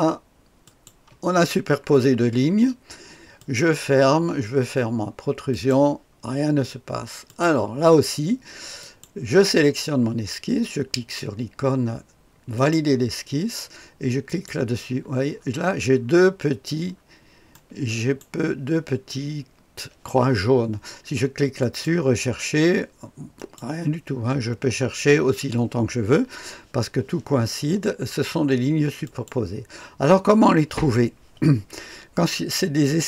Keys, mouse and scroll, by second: 0.6 click, 3.4 click, 5.5 click, 7.2 click, 8.8 click, 12.5 click, 14.2 click, 15.3-16.0 scroll up 2, 16.0-16.6 scroll up 1, 16.6-17.5 scroll up 1, 17.5 click, 21.6 click, 23.3 click, 29.0 click.